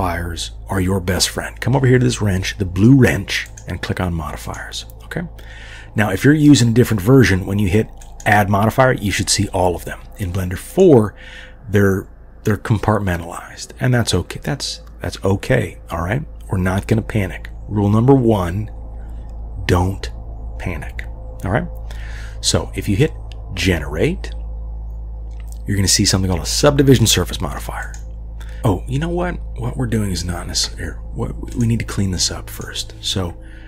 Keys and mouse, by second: 3.5 click, 4.6-6.1 drag, 8.0-10.0 drag, 10.7-28.0 drag.